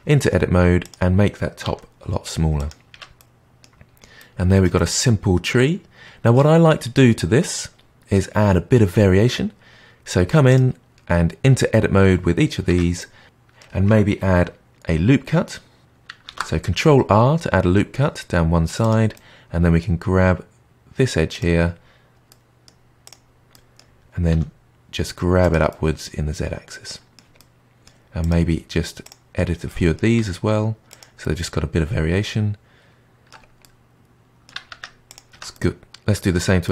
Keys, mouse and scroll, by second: 0.0 middle click, 0.8 click, 1.6 s, 2.9 Tab, 3.1-3.8 middle drag, 3.8-4.7 scroll down 2, 4.7-7.7 middle drag, 9.4-10.4 scroll up 4, 10.4 click, 12.6 Tab, 12.9 middle click, 16.2 ctrl+r, 19.1-21.3 middle drag, 21.3 click, 22.2 middle click, 23.0 click, 23.5-24.2 middle drag, 24.2 g, 25.6-28.1 middle drag, 28.1 click, 29.0 click, 29.6 middle click, 30.1 g, 31.1-34.7 middle drag, 34.7 Tab, 35.0 click, 35.3 Tab, 35.5-36.7 middle drag.